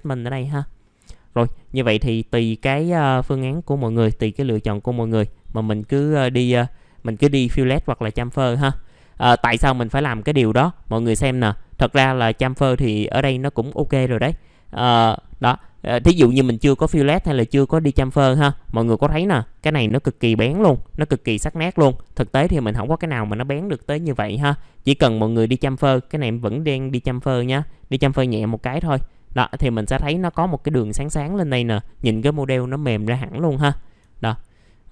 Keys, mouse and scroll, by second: 0.8 middle click, 1.2-2.5 scroll up 1, 2.5 click, 4.1 click, 4.9 scroll down 1, 5.2 alt+middle click, 5.8-6.1 scroll up 1, 6.9 middle click, 8.5 F4, 8.9-9.7 scroll down 1, 9.7 middle click, 10.0-13.9 scroll up 1, 16.5 alt+middle click, 27.5-31.1 drag, 33.0 alt+middle click, 34.2-34.9 scroll up 1.